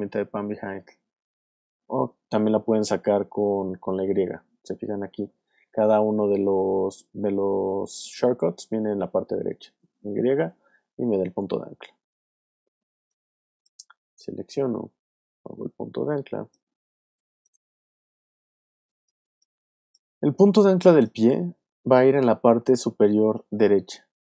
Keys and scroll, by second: 10.1 y, 16.8 space, 17.6 alt+space, 18.7 alt+space, 19.7 space.